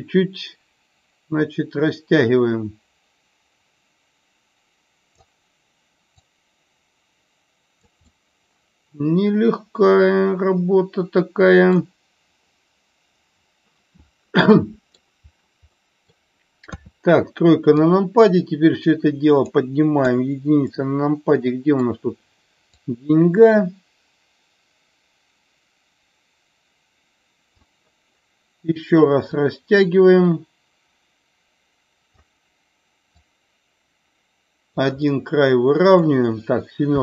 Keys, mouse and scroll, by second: 6.1-7.9 drag, 8.1-11.8 middle drag, 14.3 middle click, 15.8 middle click, 16.6 KP_3, 17.8-19.5 drag, 20.0 KP_1, 20.8-21.9 middle drag, 22.9-27.6 drag, 29.4-32.1 drag, 33.1-34.8 drag, 35.0-36.1 middle drag, 36.9 KP_7.